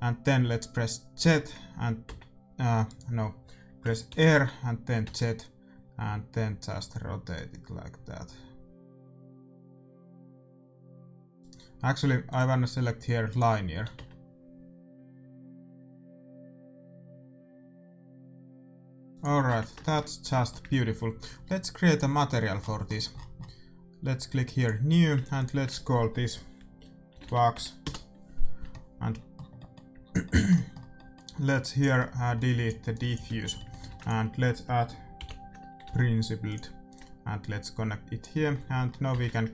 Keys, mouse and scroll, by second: 1.1 r, 4.0 r, 12.2-14.0 drag, 13.7 r, 19.4 Tab, 20.3-25.6 middle drag, 21.8-23.8 drag, 24.5-27.2 drag, 31.0-32.9 middle drag, 31.5-34.8 drag, 33.2 x, 33.8-35.4 middle drag, 33.8 shift+a, 37.3-39.3 drag, 38.9-39.5 middle drag, 39.2 shift+z.